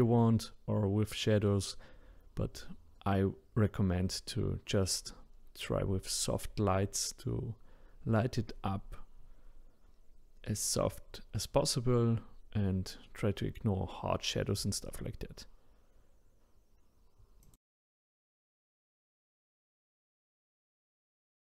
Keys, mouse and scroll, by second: 0.0 click, 0.4-1.2 middle drag, 1.2 click, 1.6 middle click, 2.1 click, 2.4 click, 2.8 click, 3.1 click, 3.3 middle click, 3.8 click, 3.9-4.3 scroll up 1, 4.3 scroll down 3, 4.6 click, 5.1 middle click, 5.3 click, 7.8 middle click, 8.4 click, 8.5-8.8 scroll up 1, 8.8 click, 9.8 scroll down 1, 9.9 middle click, 10.9-11.7 drag, 11.7-13.2 middle drag, 13.2 scroll down 1, 13.7-15.0 middle drag, 15.0 click, 15.5-21.0 middle drag.